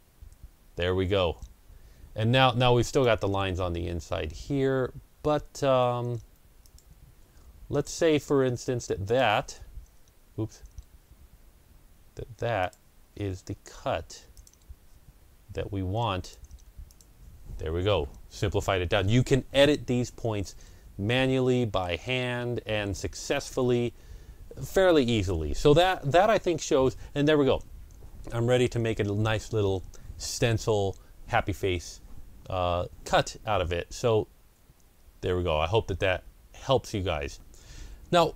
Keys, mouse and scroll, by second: 2.8 Delete, 2.8 click, 6.5 shift+click, 6.5 shift+click, 8.9 shift+double click, 12.5 shift+click, 14.2 shift+click, 16.1 shift+click, 16.8 click, 20.3-23.7 middle drag, 21.9 scroll up 1, 22.4-23.5 scroll down 1, 23.7-24.3 ctrl+scroll up 1, 33.3 scroll down 1, 33.5 ctrl+scroll down 1, 34.6-35.9 ctrl+scroll down 1, 37.4 ctrl+scroll down 1.